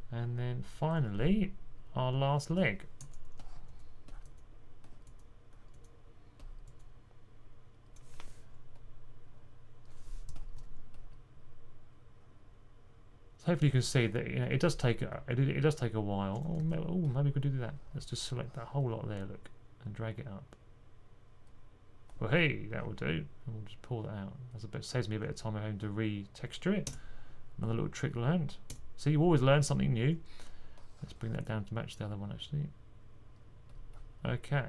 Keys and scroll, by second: 10.4 2, 16.5 super+z.